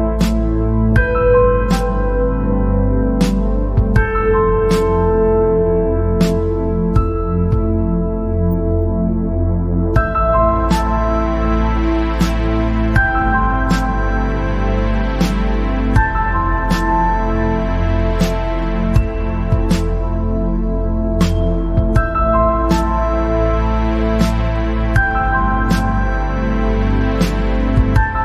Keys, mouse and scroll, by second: 0.9 KP_0, 1.6 click, 1.9 scroll down 3, 2.3 scroll up 4, 2.6 scroll down 3, 2.7 middle click, 3.5-3.8 scroll up 4, 3.8 scroll down 2, 4.0-5.1 middle drag, 5.1-5.6 scroll up 1, 5.6 click, 9.6 click, 11.4 click, 13.5 click, 13.7 scroll down 1, 13.9 middle click, 14.4-15.0 scroll up 2, 15.0 click, 17.9 click, 20.2 click, 21.3 click, 21.7 click, 22.0 scroll down 3, 24.6 click, 25.3 click, 25.5 scroll down 4, 25.9-26.6 scroll up 7, 26.6 scroll down 1, 26.8-28.2 middle drag.